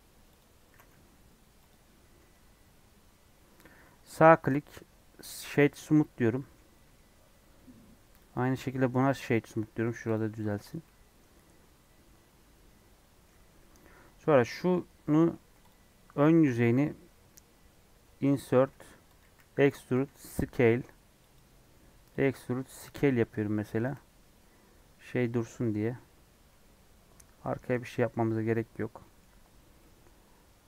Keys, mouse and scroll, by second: 0.7 s, 2.3 Tab, 2.6 scroll down 4, 5.9 right click, 6.2 middle click, 6.9 scroll up 1, 8.2 click, 9.0-10.1 right drag, 10.1 click, 10.3 middle click, 10.7 click, 10.8-13.5 middle drag, 13.5 Tab, 15.1 middle click, 15.4 3, 15.7 click, 15.9 middle click, 16.4-17.8 scroll up 2, 17.8 i, 19.2 e, 22.3 s, 23.9 Tab, 24.2 scroll down 3, 24.3-25.6 middle drag, 25.6 scroll up 3, 25.9 middle click, 26.3 scroll down 2, 26.5-27.5 middle drag, 27.5-27.9 scroll down 3, 27.9 scroll up 1, 28.1 scroll down 1, 29.8 middle click, 30.2-30.6 scroll down 5.